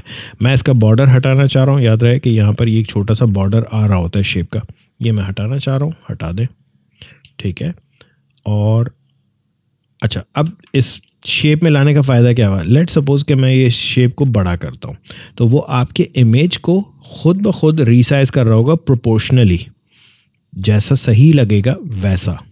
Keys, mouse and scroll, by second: 0.3 alt+scroll up 1, 0.7 click, 1.6 space, 1.7 click, 2.1 space, 2.6 alt+scroll up 1, 5.9 click, 6.7 alt+scroll down 1, 7.6 space, 7.8 click, 8.1 space, 9.1 click, 9.1 space, 10.7 alt+scroll down 1, 13.1-22.5 drag.